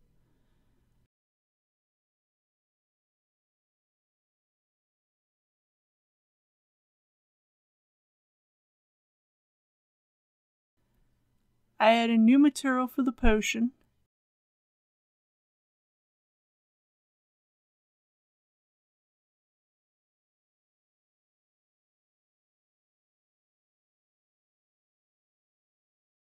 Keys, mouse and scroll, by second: 1.4 scroll up 1, 1.7 middle click, 2.7 click, 3.1 KP_Decimal, 3.7 KP_5, 3.9 middle click, 5.0 click, 7.3 KP_Decimal, 8.2 KP_5, 10.7 click, 22.4-23.2 typing, 23.5 Return.